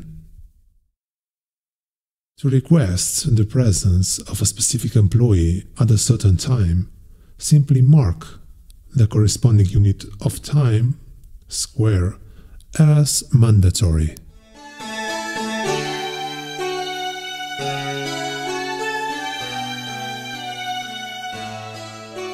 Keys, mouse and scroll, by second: 6.9 click, 11.1 click, 12.4 click, 17.8 click, 19.7 click, 21.8-22.2 scroll up 2.